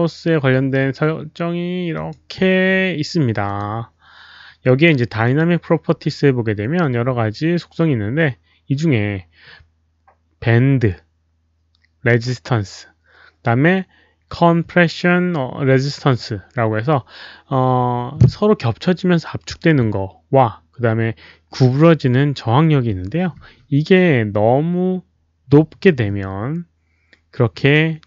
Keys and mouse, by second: 1.9 alt+click, 3.4 click, 5.2 ctrl+a, 5.2 click, 8.7 ctrl+a.